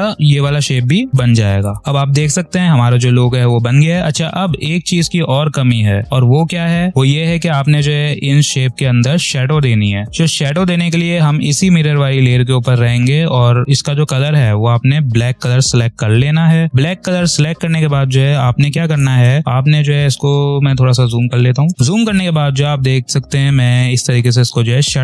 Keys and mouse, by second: 0.0-1.4 ctrl+drag, 1.8 ctrl+-, 2.1 click, 2.4 space, 3.0 space, 3.3 v, 10.2 click, 13.4 space, 13.6 click, 13.7 space, 15.0 i, 15.3 click, 16.7 p, 17.9 space, 18.1 click, 18.5 space, 18.6 space, 19.6 ctrl+=, 20.9 click, 21.3 space, 22.0 click, 24.1 click, 24.4 space, 24.6 click, 24.6 click, 24.9 space.